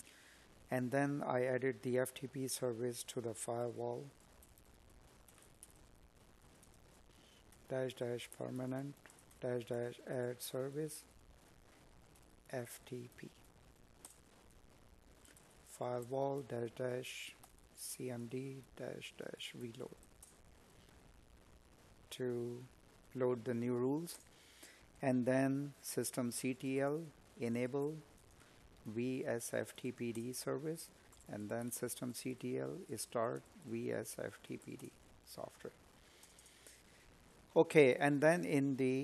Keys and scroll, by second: 4.9 space, 7.3 space, 16.4 space, 25.1 space, 26.4 space, 30.4 space, 31.5 space, 36.2 space.